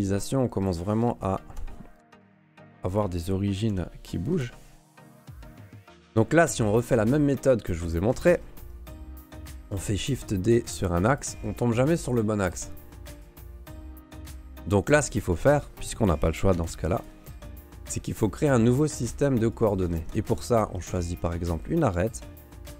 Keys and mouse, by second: 1.3 alt+right click, 2.0 Delete, 3.7 l, 4.3 Delete, 5.4 right click, 5.8 ctrl+s, 6.3 shift+click, 7.3 Tab, 7.8 Tab, 8.1 a, 8.3 a, 9.6 shift+d, 12.4 g, 14.3 middle click, 14.9 g, 15.5 middle click, 16.5 Delete, 18.9 ctrl+Tab, 19.6 click, 21.1 right click.